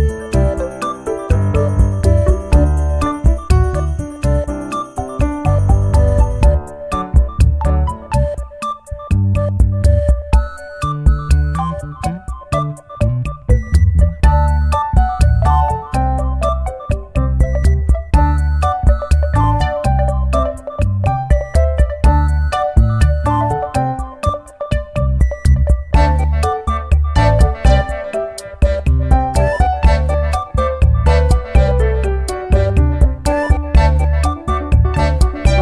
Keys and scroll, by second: 2.1 ctrl+-.